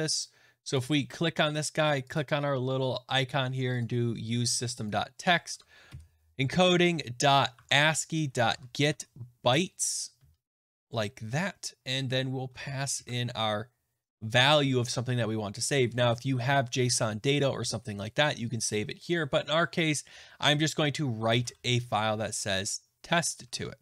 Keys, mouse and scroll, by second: 0.5 scroll, 0.7 click, 2.1 click, 3.7 click, 4.8 click, 5.4 BackSpace, 7.5 Tab, 8.1-9.3 typing, 10.5 Return, 12.5 Tab, 12.9 typing, 20.9-21.8 typing, 23.2 Right, 23.4 Right.